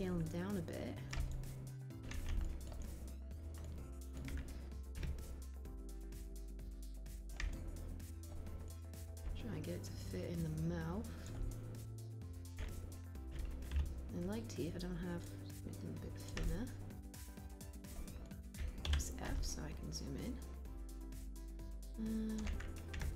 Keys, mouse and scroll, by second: 5.1 w, 13.7 r, 18.7 f, 22.9 w.